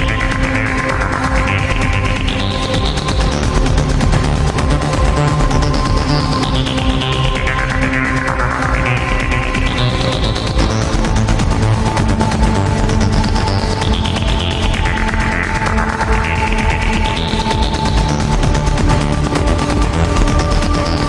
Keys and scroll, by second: 13.0 alt+space.